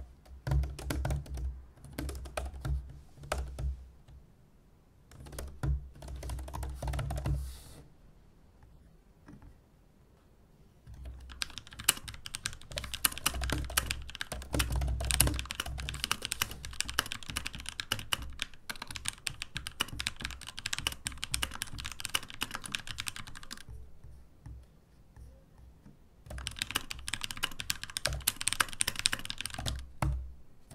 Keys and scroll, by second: 26.3 super+c, 28.0 super+h, 30.0 alt+shift+super+v.